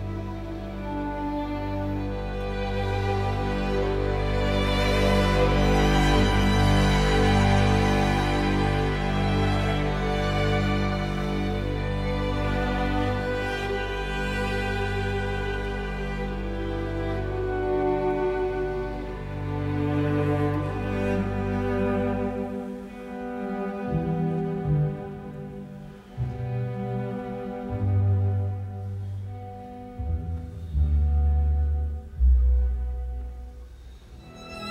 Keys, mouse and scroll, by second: 8.3 ctrl+v, 10.7 Escape, 12.5 KP_0, 12.7 Return, 17.1 Delete, 25.6 Delete, 26.4 Escape.